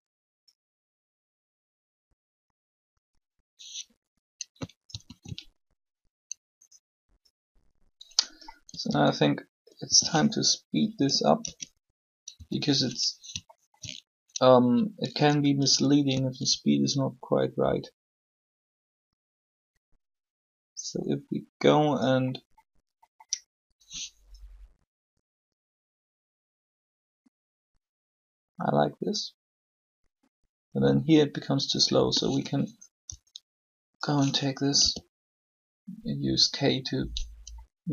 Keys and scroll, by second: 5.0 alt+a, 8.6 a, 8.7 a, 9.8 s, 10.9-12.0 typing, 33.0 b, 34.7 k.